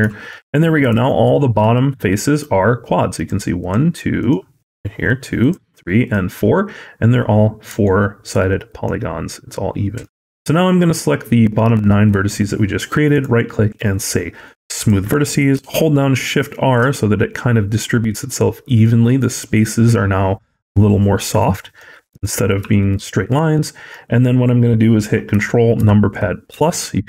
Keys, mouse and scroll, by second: 0.1 middle click, 0.9 shift+middle click, 1.8 middle click, 3.0 click, 3.4 click, 4.0 click, 4.5 click, 5.2 click, 5.9 click, 7.7 shift+middle click, 8.7 click, 13.0 right click, 15.4 shift+r, 15.9-16.6 shift+r, 21.3-21.6 scroll down 4, 22.0 middle click, 22.0-22.5 scroll up 3, 22.5 shift+middle click, 23.4 middle click, 23.8-25.2 scroll up 1, 25.6 ctrl+KP_Add.